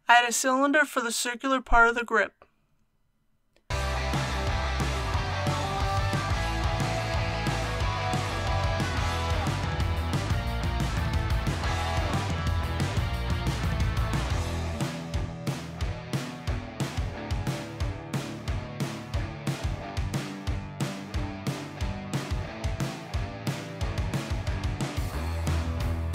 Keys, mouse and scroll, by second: 1.5 click, 3.5-6.0 typing, 4.7 click, 5.7 click, 8.2 click, 8.5 ctrl+z, 8.8-11.8 typing, 9.3 click, 9.6 click, 10.1-10.4 scroll up 1, 11.0 click, 11.7 click, 12.7 click, 13.0 typing, 13.8 shift+click, 14.0 scroll up 1, 14.2 shift+middle click, 14.4 shift+3, 14.8 click, 15.9 typing, 17.2 click, 17.5 middle click, 17.9-19.1 typing, 18.0 click, 18.0 right click, 18.2 middle click, 18.7 click, 18.8 right click, 19.6 click, 20.4 i, 21.2 ctrl+i, 21.6-23.3 typing, 22.2 click, 22.8 ctrl+r, 22.9 scroll up 1, 23.1 click, 23.9 click, 24.1 click, 24.4 alt+x, 24.5 click, 24.9 alt+h, 25.2 alt+a, 25.4 middle click, 25.9 KP_1.